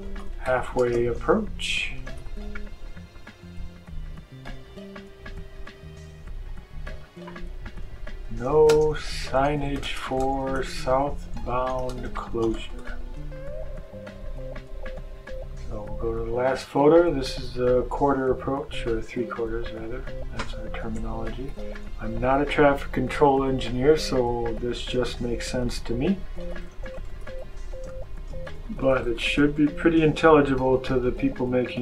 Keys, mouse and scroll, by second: 0.0-2.6 typing, 3.2 click, 6.8 click, 7.9-13.2 typing, 16.2 click, 18.0 click, 19.6 click, 20.7-22.4 typing, 24.9-29.9 typing.